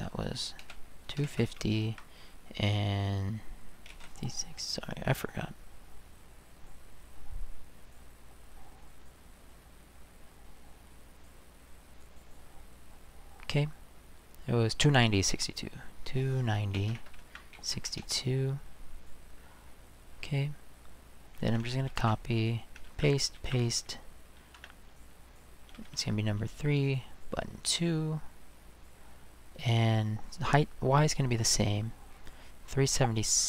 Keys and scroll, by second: 0.6-1.6 typing, 1.8 Tab, 3.9 typing, 7.1 typing, 16.3-18.0 typing, 21.9 ctrl+c, 22.9 ctrl+v, 23.4 ctrl+v, 24.6 space, 25.9 3.